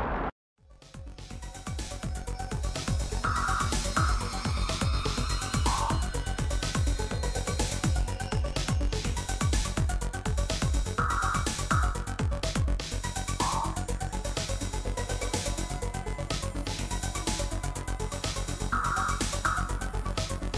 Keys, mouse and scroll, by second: 2.2 super+q, 4.0 super+e, 6.1-7.7 drag, 10.4-11.6 drag, 11.0-14.0 typing, 15.0 click, 16.5 click, 18.9 click, 20.0 typing.